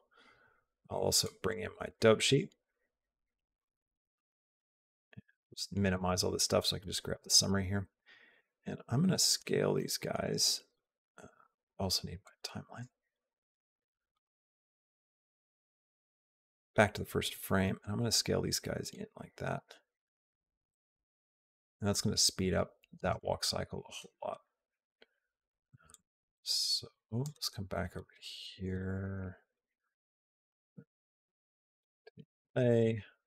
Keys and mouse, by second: 1.2 click, 1.7 click, 2.5 click, 4.5 middle click, 5.7 click, 6.9 click, 8.2 s, 12.0 click, 12.8 click, 14.1 click, 16.3 click, 17.5 s, 19.4 space, 25.7-27.0 drag, 29.3 click, 30.3 click, 32.6 click.